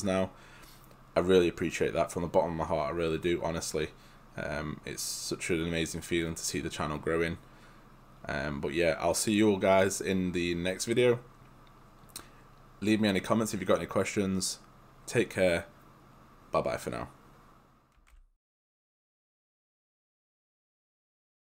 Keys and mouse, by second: 18.2 alt+F9.